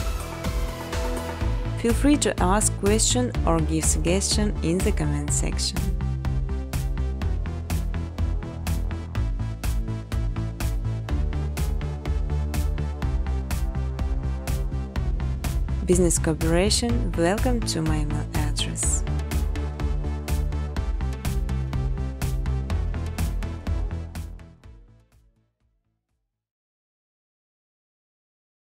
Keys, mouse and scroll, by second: 0.6 Tab, 1.1-2.4 typing, 3.8 Tab, 4.3 Return, 4.7-6.3 typing, 7.3 ctrl+c, 7.8 ctrl+d, 8.9 click, 9.1-12.5 typing, 10.4 click, 12.2 click, 13.6 space, 14.0 space, 14.9 space, 15.2 space, 16.3 space, 16.7 click, 17.0 right click, 18.9 click, 19.9 click, 20.2-21.5 typing, 22.5 click, 22.7 click, 23.2 space, 25.2 space, 25.6 middle click, 25.9 space, 27.0 space, 27.2 middle click, 28.6 space.